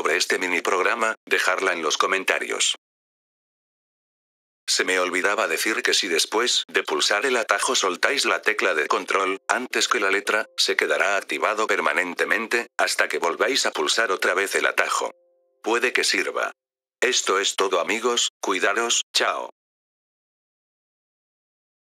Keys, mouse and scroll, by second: 4.2 click, 7.3 click.